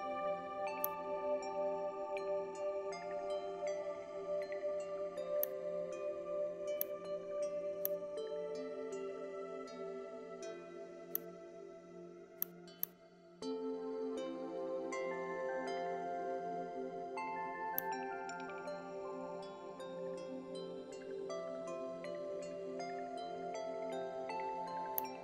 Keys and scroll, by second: 9.8 l, 19.5 ctrl+g.